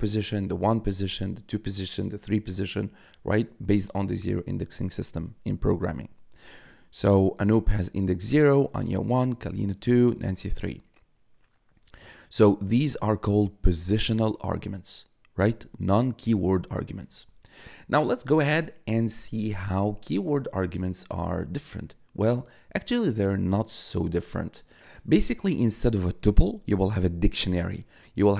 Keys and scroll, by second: 7.5 1, 17.2 1.